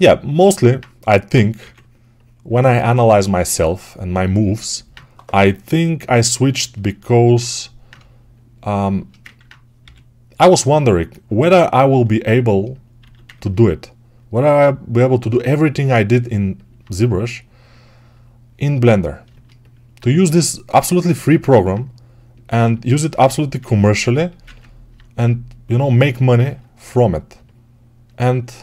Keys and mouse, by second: 1.5 2, 5.2 g, 7.7-11.7 shift+drag, 9.7 g, 12.9 alt+q, 16.1-22.4 right drag, 22.4-27.2 alt+drag, 27.2-28.6 alt+right drag.